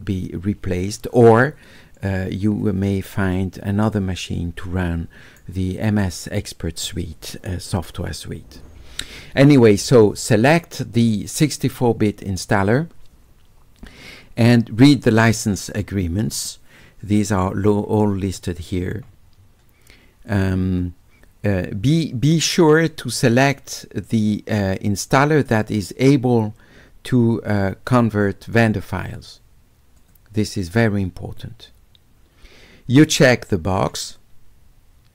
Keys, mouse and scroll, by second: 12.5 click, 15.4 click, 17.3 middle click, 17.8 middle click, 18.3 middle click, 19.0 middle click, 20.3 click, 22.8 click, 30.0 click, 33.8 click.